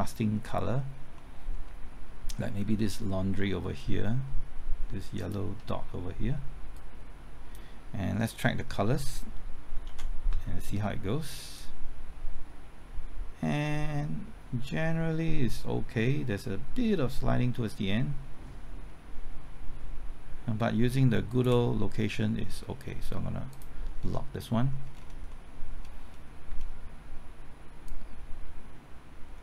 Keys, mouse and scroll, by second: 0.8-1.1 scroll up 1, 1.1 middle click, 5.2 ctrl+click, 6.7 click, 9.8 ctrl+t, 11.5-21.7 drag, 24.0 scroll down 1, 25.3 middle click, 27.8-29.4 drag.